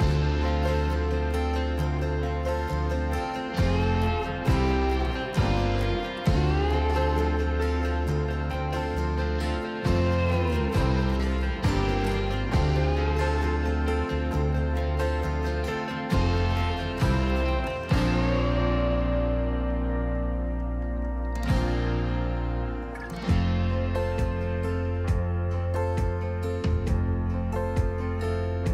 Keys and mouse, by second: 2.9 middle click, 4.5 middle click, 4.7-7.2 drag, 8.8-9.2 drag, 9.6 s, 11.3 click, 12.5 shift+a, 16.2 r, 16.9 x, 17.1 KP_9, 17.2 KP_0, 17.5 KP_Enter, 18.6-19.0 drag, 20.4 click, 21.0 s, 22.3 click, 23.6-25.1 drag, 26.8 click.